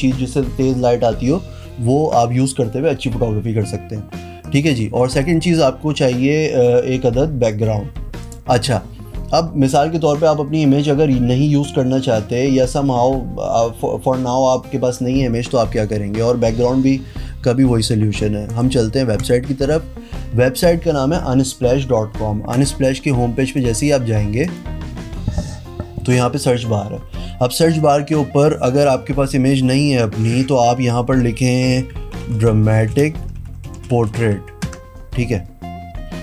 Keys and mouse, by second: 4.4 click, 5.2 click, 8.2 click, 22.5 click, 22.6 right click, 23.5 click, 24.4 click, 27.8 click, 31.7-34.6 typing, 34.7 Return.